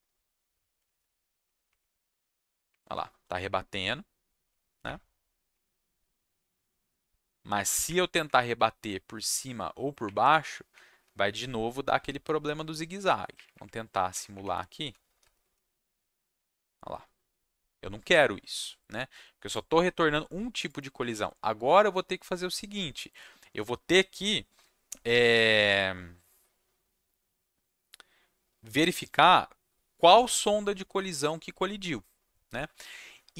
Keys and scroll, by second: 1.6 Up, 2.0 Down, 2.7 Up, 3.9 Down, 4.8 Up, 5.8 Down, 7.8 Up, 8.5 Down, 10.0 Up, 11.0 Down, 13.0 Down, 13.3 Up, 13.5 Up, 13.9 Up, 14.1 Up, 14.3 Up, 14.5 Down, 15.2 Down, 15.4 Down.